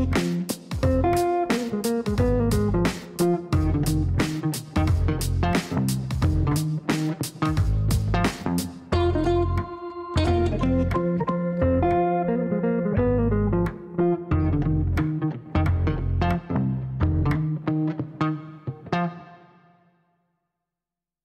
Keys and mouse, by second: 1.8 click, 4.0 click, 6.9 click, 8.5 click, 10.3 KP_Subtract, 10.7-12.8 typing, 13.0 Down, 14.3-15.3 typing, 15.4 Down, 15.6 Down, 15.7 Down, 15.9 Down, 16.1 Down, 16.2 Down, 16.7 Down, 17.1 Return, 18.5 click, 20.4 click.